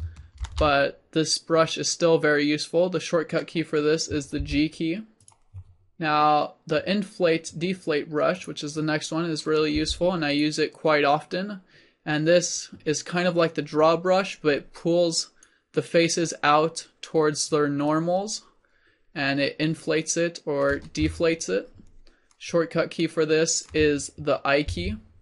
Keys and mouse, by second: 0.9 ctrl+z, 4.4 g, 5.2-6.9 drag, 9.8 f, 10.4-14.4 drag, 17.9-21.1 drag.